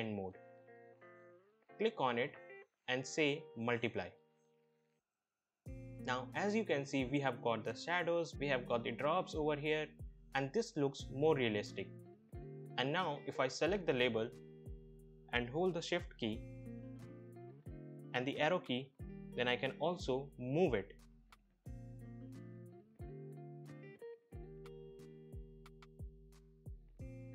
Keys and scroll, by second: 17.4 shift+Right, 18.9 shift+Right, 20.2 shift+Right, 20.3 shift+Right, 20.9 shift+Right, 21.0 shift+Right, 22.4 shift+Right, 22.5 shift+Right, 22.6 shift+Right, 22.7 shift+Right, 23.4 shift+Left.